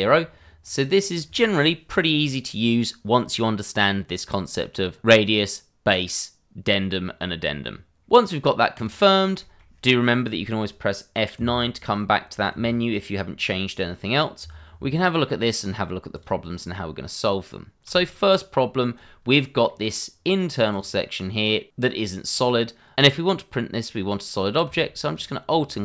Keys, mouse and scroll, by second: 0.3-0.6 scroll down 1, 0.6 middle click, 7.7 middle click, 8.1 scroll up 1, 8.3 middle click, 9.0 click, 9.4 shift+middle click, 11.3 F9, 14.4 Escape, 15.1 middle click, 16.1 click, 16.5 scroll up 1, 17.2-17.8 scroll down 1, 17.8 Tab, 19.7 middle click, 20.6 click, 21.5 middle click, 22.9 click, 25.1 alt+click.